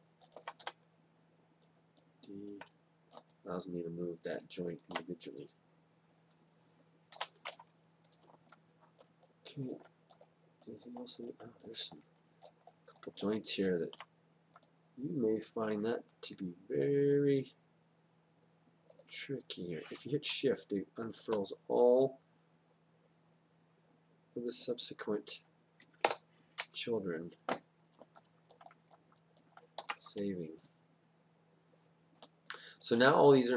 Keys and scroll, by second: 0.6 d, 7.1 d, 26.1 Delete, 30.8 ctrl+s.